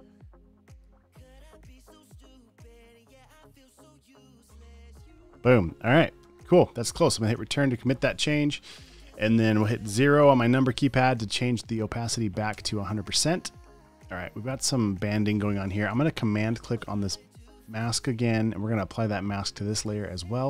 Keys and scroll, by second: 6.7 Return, 8.8 space, 9.3 space, 13.0 0.